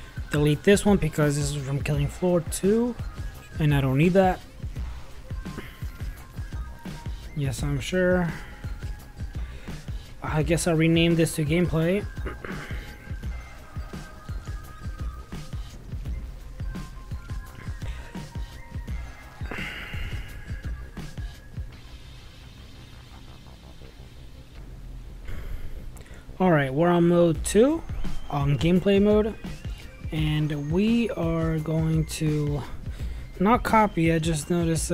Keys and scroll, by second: 16.0-24.2 typing.